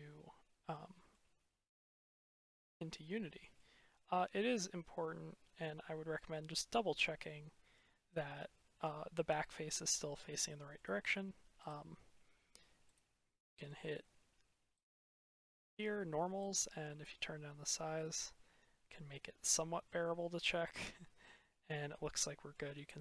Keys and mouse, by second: 2.0 click, 2.2-2.6 middle drag, 2.6-3.5 drag, 3.9 click, 4.1 middle click, 4.3 click, 5.1-7.6 middle drag, 9.3-9.8 middle drag, 10.3-10.6 drag, 11.6-13.6 drag, 14.7-17.8 drag, 17.8 click, 18.0 middle click, 19.4 middle click, 21.2 middle click, 21.4-22.4 drag.